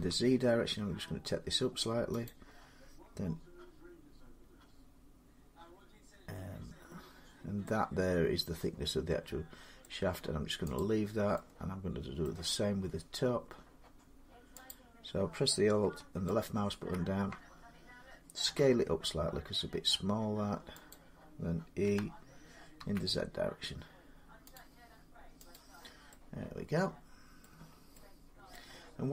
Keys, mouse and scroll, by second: 2.1 click, 6.0-7.1 drag, 9.6 middle click, 10.6 click, 12.0 middle click, 12.5 scroll, 12.5 scroll up 3, 13.0 scroll down 3, 14.5 click, 16.2 alt+click, 18.3 s, 20.7 click, 21.6-22.6 typing, 24.4 click, 25.3 click, 27.2 middle click, 27.4 scroll down 3, 28.3 middle click, 29.0-29.1 scroll down 3.